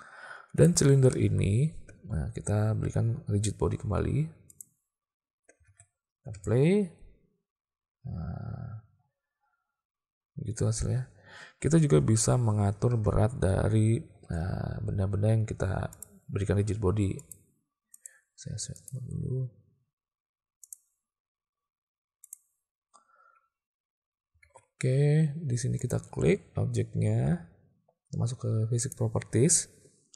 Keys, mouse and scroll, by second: 0.6 click, 1.2 click, 4.5 click, 5.7 alt+a, 6.4 space, 12.9 space, 16.1 click, 17.2 click, 18.0 click, 20.8 click, 22.3 click, 24.5 alt+a, 25.8 click, 28.9 click.